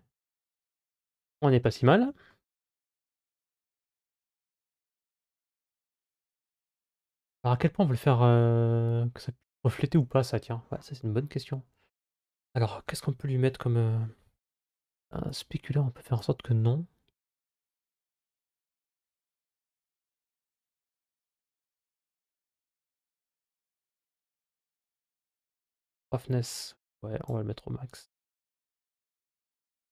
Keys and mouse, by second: 3.1 ctrl+s, 4.1 z, 11.8 click, 15.3 click, 25.8-27.3 drag.